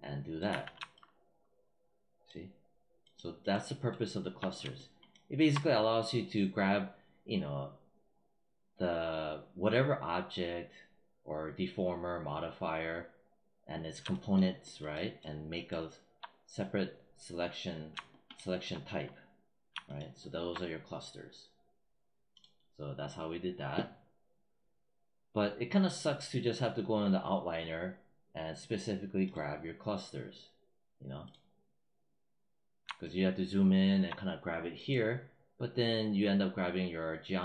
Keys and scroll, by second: 0.3 z.